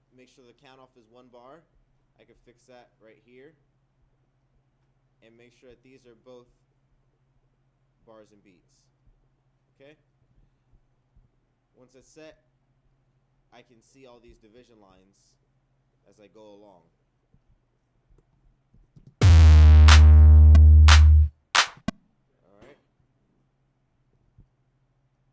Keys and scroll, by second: 21.1 Return.